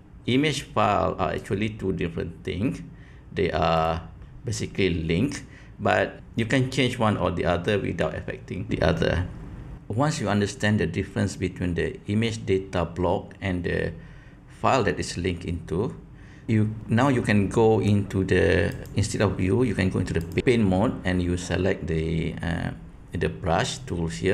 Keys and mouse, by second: 1.5-3.9 drag, 18.7-20.4 drag.